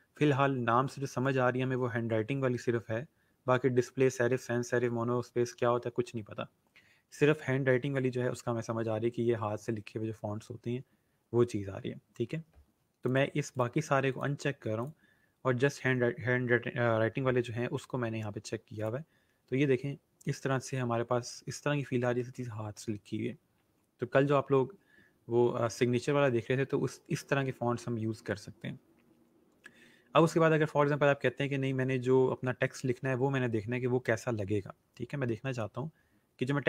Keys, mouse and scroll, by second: 13.0 click, 18.7 click, 19.4 scroll down 1, 26.2 scroll up 1, 29.1 scroll down 1, 34.3 scroll up 1.